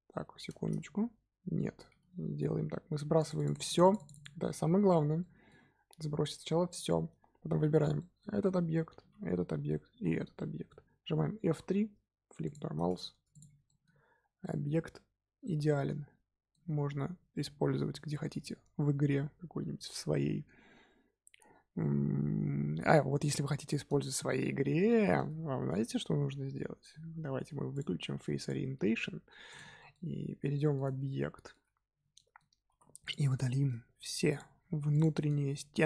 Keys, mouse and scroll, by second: 0.8 z, 1.5 z, 3.1 click, 3.3 click, 3.5 click, 3.6 click, 3.8 click, 3.9 click, 4.1 click, 4.4-7.4 middle drag, 7.4 l, 7.9-9.0 middle drag, 9.0 l, 10.3-11.5 middle drag, 11.5 F3, 12.7-13.1 scroll down 2, 13.1 Tab, 13.3 click, 13.6-17.4 middle drag, 23.4-25.3 middle drag, 25.3 z, 25.8 z, 26.4 scroll down 1, 27.7-28.7 drag, 28.7 z, 29.0-29.5 scroll up 2, 29.5 click, 29.7 shift+middle drag, 30.0 scroll up 2, 30.5 middle drag, 30.8 Tab, 31.0-31.9 middle drag, 31.9 z, 32.1-32.6 middle drag, 32.6 3, 33.0 click, 33.2-34.2 middle drag, 34.2 click, 34.9 shift+click, 35.2-35.8 middle drag.